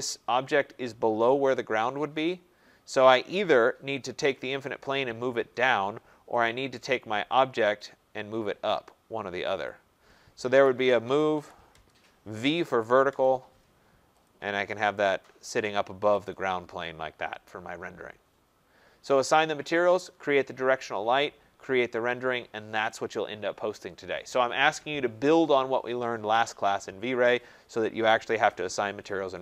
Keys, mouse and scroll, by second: 1.7 middle click, 1.7 middle click, 1.8 middle click, 3.9 click, 6.3 click, 7.7 click, 9.6 click, 10.3-13.4 typing, 14.2 click, 15.1 click, 16.2 click, 16.7 middle click, 16.7 middle click, 17.1 middle click, 21.4-21.8 scroll, 23.1-23.5 scroll.